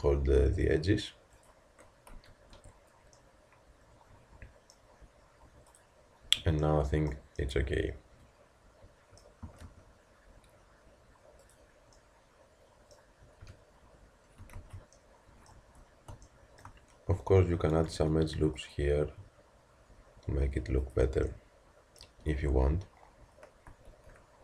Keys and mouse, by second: 2.1 z, 2.5 Tab, 4.1-6.6 middle drag, 7.0-7.4 middle drag, 9.5 r, 13.4 KP_Decimal, 14.6 ctrl+z, 17.2 Tab, 18.2 ctrl+r, 22.3 Tab, 23.9 ctrl+r.